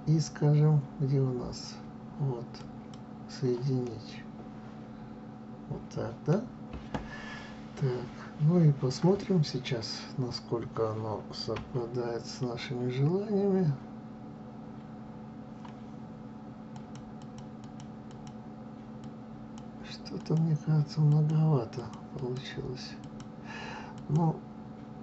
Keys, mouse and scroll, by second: 3.7-11.5 middle drag, 11.5 KP_3, 16.6 click, 17.1 click, 17.5 click, 17.9 click, 18.9 click, 20.0 click, 20.9 click, 21.6 click, 22.1 click, 22.9 click, 23.9 click.